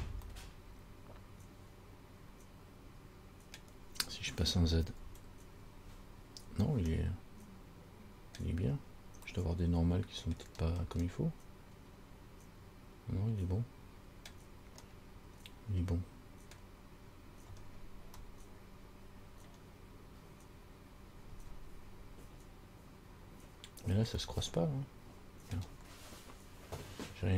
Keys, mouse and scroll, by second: 0.5 middle click, 5.2 z, 6.0-6.9 scroll up 5, 7.2 middle click, 8.9-9.4 scroll down 3, 9.6 middle click, 10.6-11.3 scroll down 3, 11.3 middle click, 15.1 middle click, 17.8 scroll down 3, 18.4 middle click, 19.6 middle click, 20.6-21.1 scroll up 3, 23.8-24.3 scroll up 2, 24.4 middle click.